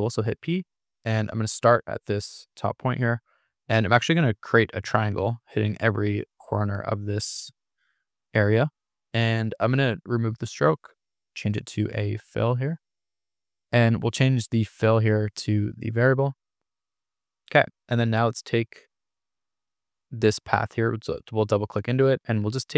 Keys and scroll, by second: 13.3 super+z, 16.5 Escape.